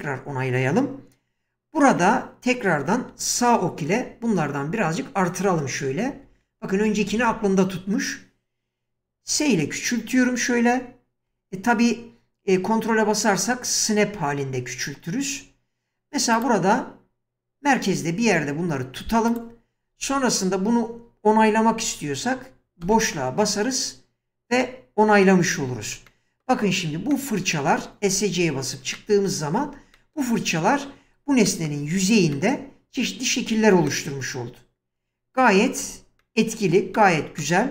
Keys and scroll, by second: 3.1 Right, 9.3 s, 22.9 space, 28.1 Escape.